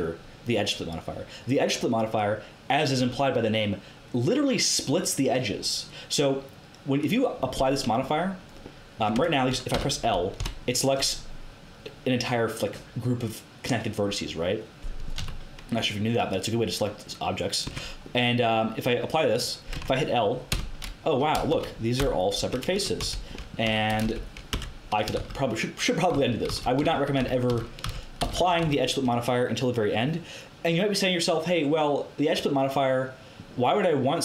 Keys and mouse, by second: 6.9 click, 7.4-8.9 middle drag, 9.1 Tab, 9.7 a, 10.3 l, 15.1 a, 17.6 Tab, 19.2-21.5 drag, 19.7 Tab, 20.4 l, 21.5-24.0 typing, 24.5 Tab, 25.1 ctrl+z, 26.1 ctrl+z, 26.4 ctrl+z, 26.7 ctrl+z, 27.1 ctrl+z, 27.4 ctrl+z, 27.8 ctrl+z, 28.1 ctrl+z, 28.4 ctrl+z, 28.6 ctrl+z.